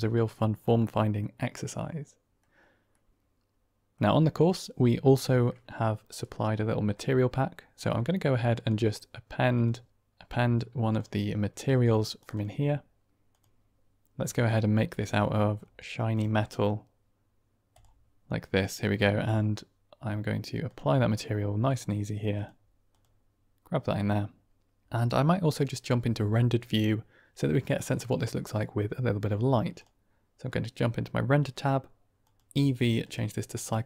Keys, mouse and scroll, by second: 0.6-1.1 middle drag, 1.4-2.3 middle drag, 2.8-3.8 middle drag, 8.6-9.6 drag, 21.5 click, 22.2-24.3 drag, 32.3-33.0 drag.